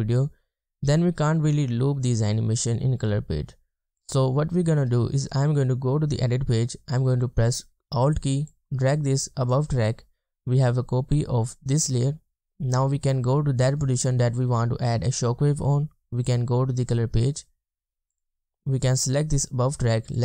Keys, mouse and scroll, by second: 4.6 drag, 8.5 alt+click.